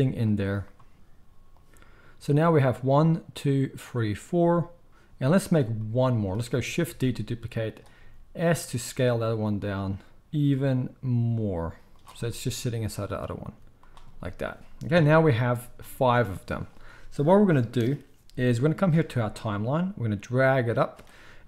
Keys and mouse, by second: 7.1 shift+d, 8.0 s, 13.4 s, 14.9 KP_1, 20.2-21.4 drag.